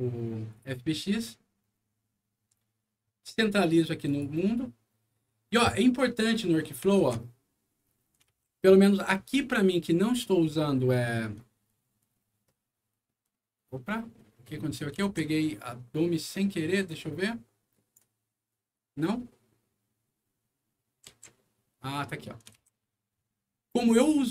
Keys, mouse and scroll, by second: 3.3 scroll up 1, 4.0 click, 6.4 middle click, 7.0 alt+w, 7.9 alt+middle click, 8.3 alt+w, 9.2-14.8 alt+scroll up 26, 10.8 alt+middle click, 15.0 alt+w, 16.9-17.9 alt+drag, 20.7 middle click, 21.0 z, 22.2 middle click, 22.5 alt+w, 23.5-24.0 alt+scroll up 2.